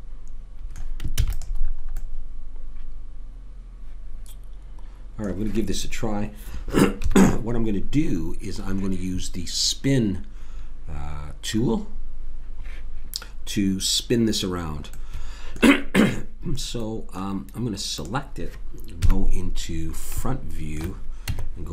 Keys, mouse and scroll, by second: 1.2 ctrl+s, 7.0 KP_7, 18.0-19.0 drag, 19.0 KP_1, 20.2 middle click, 20.6 middle click, 21.3 Tab.